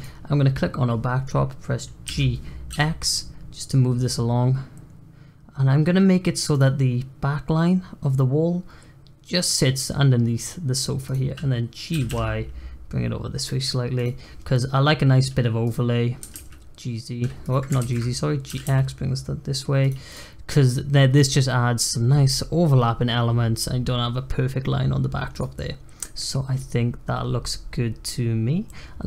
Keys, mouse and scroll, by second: 2.0 g, 11.0 click, 11.9 g, 15.6 click, 16.1 g, 17.8 ctrl+z, 18.4 g, 20.0 click, 20.6 click, 25.3 click, 25.6-25.9 scroll down 1, 25.9-28.6 scroll up 1, 28.6-29.0 scroll up 1.